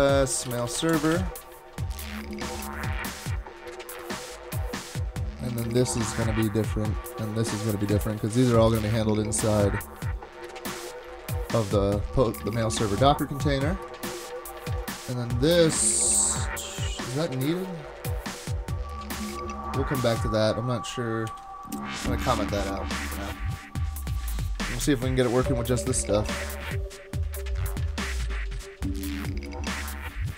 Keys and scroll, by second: 0.0-1.6 typing, 21.3 super+/.